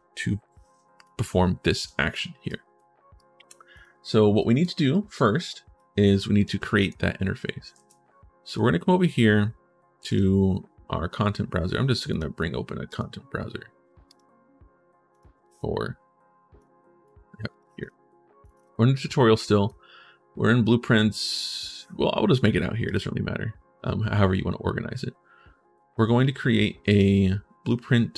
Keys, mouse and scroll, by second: 0.8 click, 2.2 right click, 2.9 right click, 3.5 right click, 4.2 right click, 4.7 right click, 5.2 right click, 6.1 right click, 6.4 right click, 7.5 ctrl+shift+s, 8.2 right click, 9.8 click, 11.9 click, 12.6 click, 13.8 click, 14.9 click, 16.4 click, 17.6 click, 18.2 click, 18.3 right click, 18.7 right click, 19.2 right click, 22.6 right click, 26.7 click.